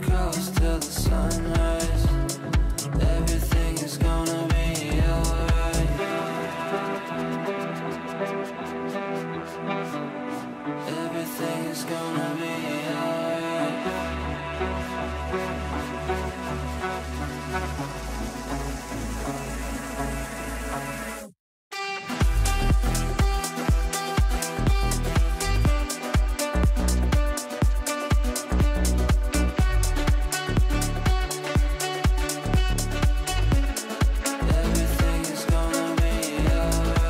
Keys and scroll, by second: 11.2 g, 33.0 ctrl+z.